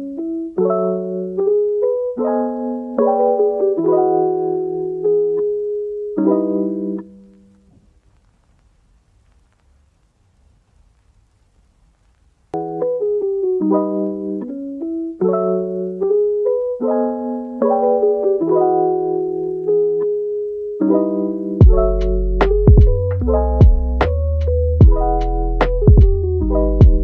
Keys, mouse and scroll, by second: 0.1 click, 0.4 g, 1.7-2.1 middle drag, 2.1 g, 2.8 middle click, 3.7 click, 4.3 click, 4.7 g, 5.5-6.2 middle drag, 6.2-6.8 scroll up 1, 6.8 g, 8.0 click, 8.3 g, 9.3 click, 9.5 g, 10.1 click, 10.4 g, 11.0-13.0 middle drag, 13.0 g, 13.3 click, 13.6 g, 14.8-16.0 middle drag, 16.0 KP_1, 16.6 click, 17.4 g, 18.7 click, 19.1 g, 20.1-22.0 middle drag, 22.0 click, 22.8-23.2 g, 24.3 click, 24.7 g, 26.4 click, 26.6 g.